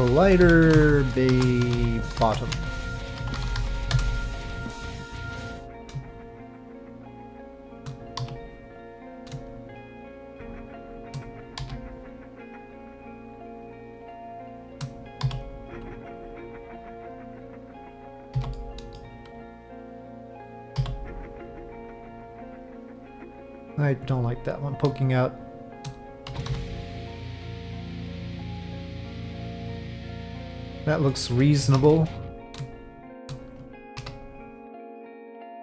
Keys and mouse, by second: 0.2 l, 3.3 t, 5.2 Tab, 5.5 1, 6.0 shift+click, 8.2 f, 9.0 click, 9.5 shift+click, 10.7 shift+click, 11.6 f, 13.8 shift+click, 14.3 shift+click, 15.2 f, 16.1 alt+click, 16.8 middle click, 18.3 f, 18.5 middle click, 19.7 alt+click, 20.7 f, 22.2 middle click, 24.5 click, 25.3 shift+click, 26.3 s, 28.4-31.1 middle drag, 31.7 3, 32.2 click, 35.4 middle click.